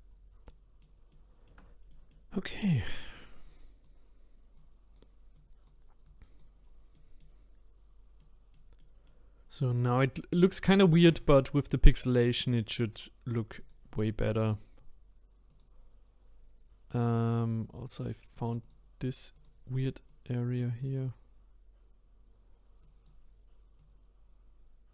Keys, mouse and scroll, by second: 0.1-0.5 scroll down 3, 0.5-2.8 middle drag, 2.8-3.4 scroll up 1, 3.4-6.6 drag, 6.6-6.9 scroll down 3, 6.9 middle click, 7.7-8.2 scroll down 3, 8.2-9.4 middle drag, 9.4-9.7 scroll down 2, 9.7 middle click, 10.2-10.7 scroll up 4, 10.7-13.6 middle drag, 13.6-17.5 drag, 17.8 click, 20.1-24.9 drag.